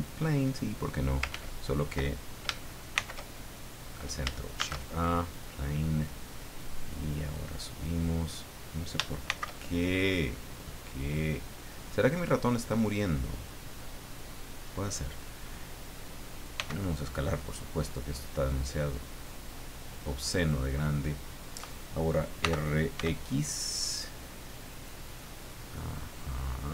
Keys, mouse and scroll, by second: 0.0 click, 1.3 ctrl+z, 2.9 shift+c, 3.8 scroll up 2, 4.6 shift+a, 5.2 click, 6.6-8.0 drag, 9.3 shift+c, 9.9-10.3 scroll up 2, 11.3-12.9 drag, 13.0-14.8 middle drag, 16.5 s, 18.6 click, 19.3-20.7 drag, 22.4 r, 22.9 x, 24.7 click, 25.2-26.7 middle drag.